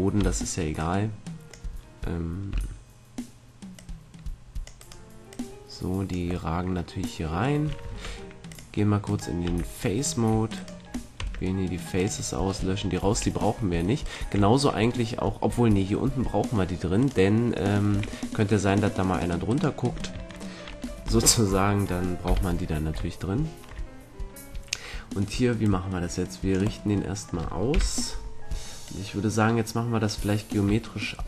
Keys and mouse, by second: 0.1 b, 2.5 c, 4.8 click, 6.4 click, 7.2 middle click, 7.9 ctrl+Tab, 9.0-12.2 right drag, 9.4 x, 11.3 x, 12.4 middle click, 13.1 a, 13.9-15.3 middle drag, 17.9 a, 21.0 ctrl+l, 22.2 KP_7, 25.5-26.8 drag, 26.8 middle click, 27.7 KP_7, 28.8-30.7 drag.